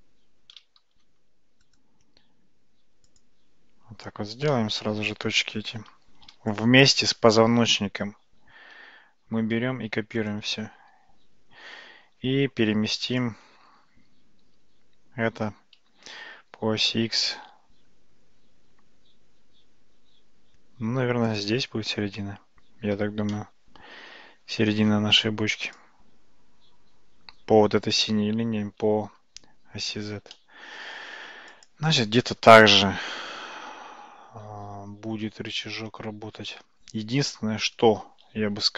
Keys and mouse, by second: 0.9 ctrl+shift+z, 1.7-3.3 right drag, 4.6-5.9 middle drag, 6.6 shift+click, 10.1 shift+d, 14.5 g, 23.4-24.9 shift+middle drag, 25.8 click, 30.4-30.9 shift+middle drag, 31.6 click.